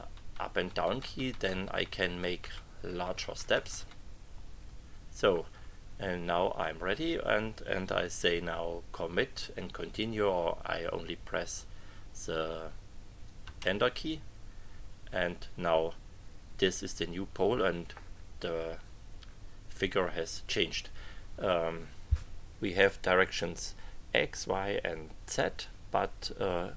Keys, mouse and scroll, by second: 2.7 Up, 13.4 Return.